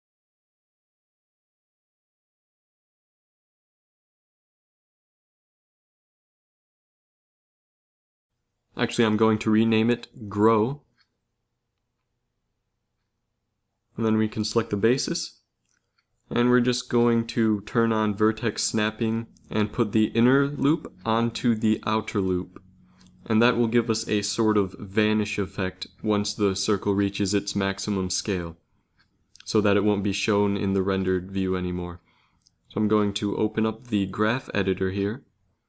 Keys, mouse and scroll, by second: 1.0-6.6 drag, 10.1-12.2 drag, 14.4-16.8 drag, 15.3 Tab, 16.8 shift+Tab, 18.0 click, 18.7 click, 18.9 click, 21.7 s, 25.8-27.4 middle drag, 27.4 Tab, 27.9 middle click, 29.0 shift+Tab, 30.9 ctrl+s, 33.0 click.